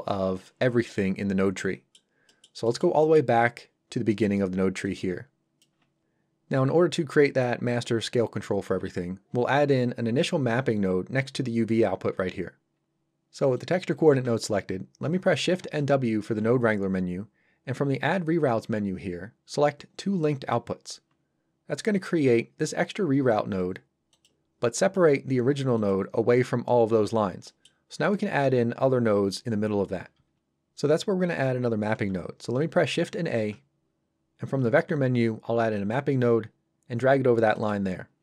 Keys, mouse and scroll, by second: 0.4 scroll up 1, 3.3 scroll up 1, 4.1 middle click, 4.4-4.8 scroll down 1, 4.8 click, 13.5 click, 20.2 click, 22.2 g, 24.1 click, 25.1 g, 25.7 click, 27.4 middle click, 33.3 shift+a, 35.7 click.